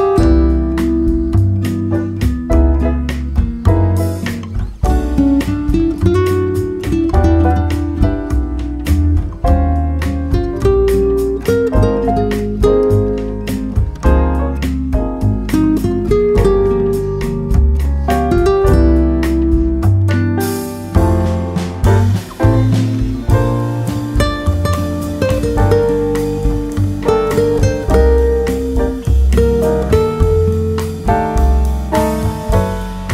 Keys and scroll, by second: 1.7 Delete, 2.3 ctrl+v, 11.2 Delete, 11.9 ctrl+v, 15.8 ctrl+z, 19.1 Delete, 19.6 ctrl+v, 24.7 Delete, 25.2 ctrl+v.